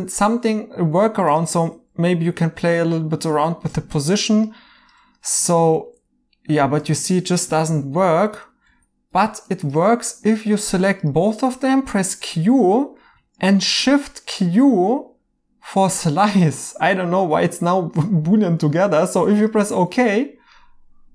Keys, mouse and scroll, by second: 3.7 g, 5.7 q, 5.9 q, 7.0 Escape, 7.5 ctrl+z, 9.0 ctrl+z, 11.8 q, 12.6 right click, 13.6 q.